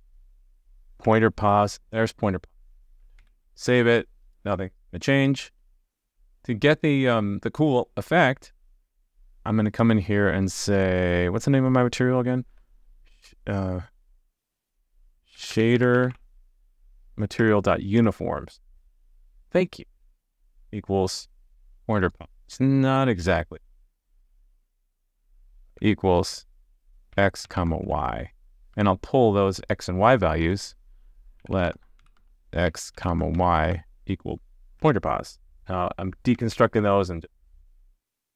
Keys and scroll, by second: 3.2 super+s, 5.5 super+s, 36.5 super+s.